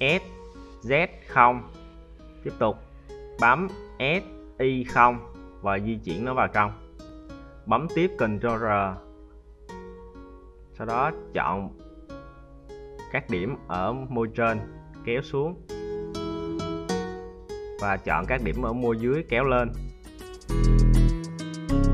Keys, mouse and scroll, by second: 1.2 s, 4.6 click, 7.1 ctrl+r, 8.8 middle click, 9.7 right click, 10.1 shift+right click, 10.5 shift+right click, 11.0 shift+right click, 11.7 z, 12.4 `, 13.7 g, 16.0 right click, 16.2 g, 17.5 right click, 17.6 g, 18.8 right click, 18.9 g, 20.8 right click.